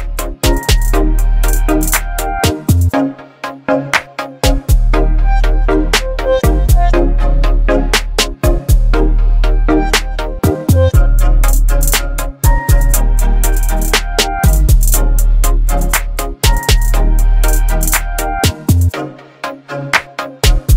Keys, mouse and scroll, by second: 3.7-4.5 typing, 6.9-9.7 drag, 12.8 click, 14.1 right click, 15.1-20.7 drag.